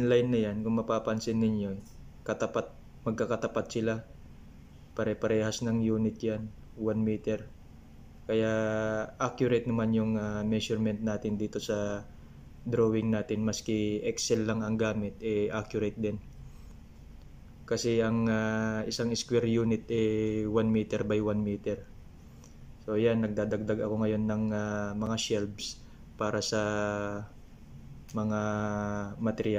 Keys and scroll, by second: 0.0 ctrl+v, 5.7 ctrl+v, 25.9 ctrl+v.